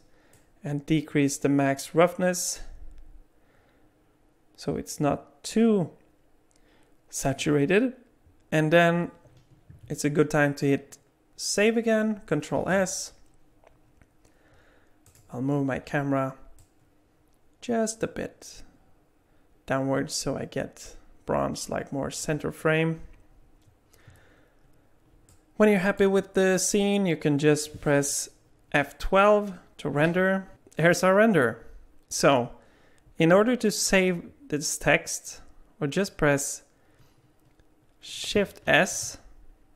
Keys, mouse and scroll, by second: 0.3 click, 12.6 ctrl+s, 15.1 click, 16.6 click, 25.3 alt+middle click.